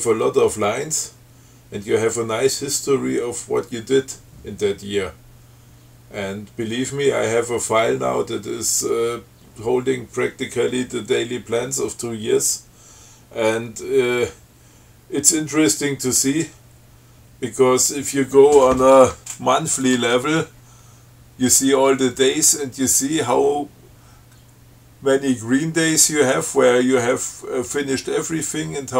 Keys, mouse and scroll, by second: 20.1 click, 20.2 Tab.